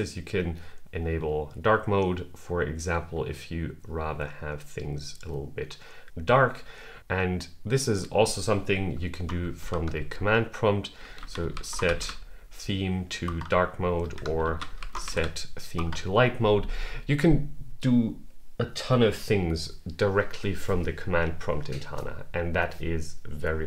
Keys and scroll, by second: 9.4 super+k, 13.8 super+k.